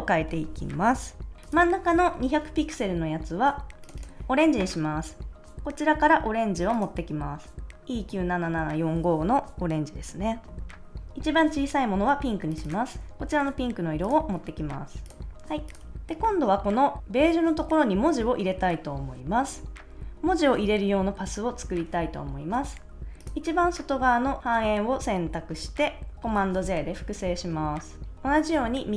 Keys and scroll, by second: 26.6 super+j.